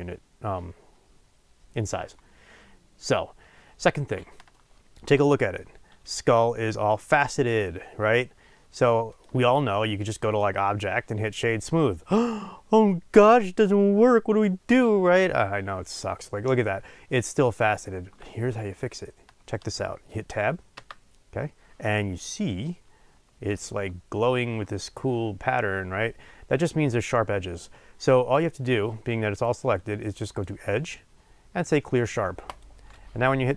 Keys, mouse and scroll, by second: 3.5-4.5 scroll up 2, 4.5-9.1 shift+middle drag, 7.0-7.9 scroll up 2, 7.9-9.1 scroll down 2, 9.1 click, 11.7-33.5 drag, 20.7 Tab.